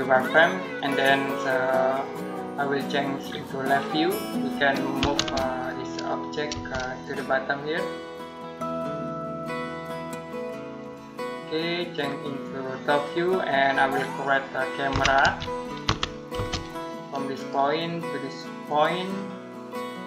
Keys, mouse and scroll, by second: 0.7 click, 3.5 click, 4.8 m, 5.0 space, 5.4 click, 6.4 space, 6.9 click, 10.6 click, 13.3-13.8 scroll down 1, 13.8 middle click, 14.7-16.2 typing, 17.2 click.